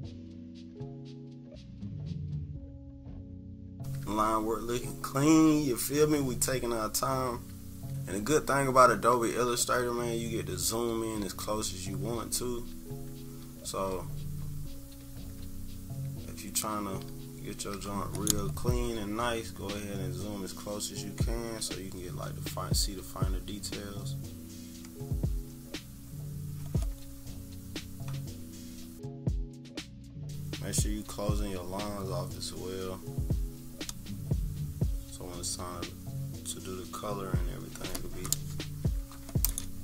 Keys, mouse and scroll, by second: 1.3 click, 2.4 click, 2.7-4.4 typing, 2.9 click, 3.2 click, 3.4 scroll up 1, 3.6 click, 3.8 scroll down 1, 4.5-5.0 scroll up 2, 6.8 scroll down 2, 8.3 ctrl+=, 9.7 scroll down 2, 10.6-11.1 scroll up 4, 11.2 ctrl+=, 12.1 -, 12.7 =, 13.6 -, 14.1-14.8 scroll down 3, 15.9 =, 16.4 scroll up 1, 17.2 -, 19.7 click, 29.1 z, 29.2 click, 29.5 click, 30.9 click.